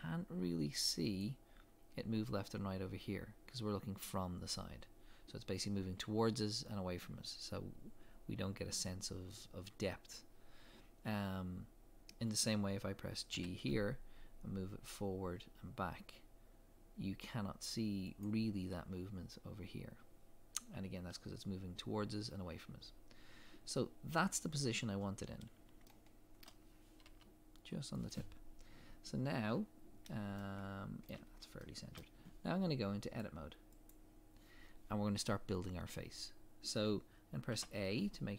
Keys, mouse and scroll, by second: 13.4 g, 24.6 scroll up 1, 25.9 shift+middle click, 27.1 g, 29.7 scroll up 1, 30.4 shift+middle click, 31.3 scroll down 1, 31.6 shift+middle click, 33.9 click, 37.5 a.